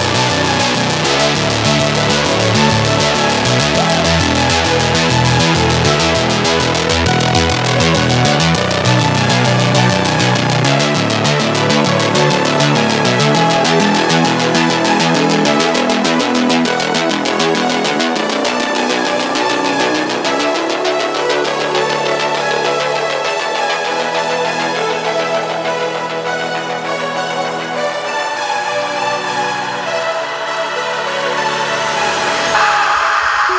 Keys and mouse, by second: 5.8-6.3 middle drag, 6.8 shift+middle click, 10.4-10.8 middle drag, 13.5 Tab, 15.3 Tab, 15.9 alt+click, 19.0 alt+shift+click, 19.4-20.7 middle drag, 22.9 shift+click, 22.9 shift+right click, 23.4 click, 23.4 right click, 24.4 shift+click, 24.4 shift+right click, 26.4 n, 32.5-33.5 drag.